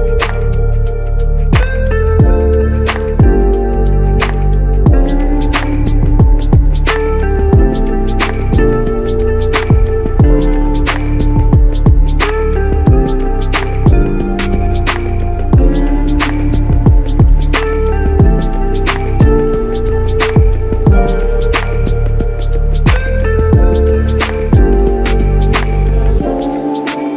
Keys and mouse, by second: 2.9 shift+click, 4.0 shift+click, 5.7 double click, 17.0-17.7 typing, 20.5 typing, 23.3 typing, 23.4 alt+click, 24.6 alt+click, 24.8 ctrl+click, 26.9 ctrl+click.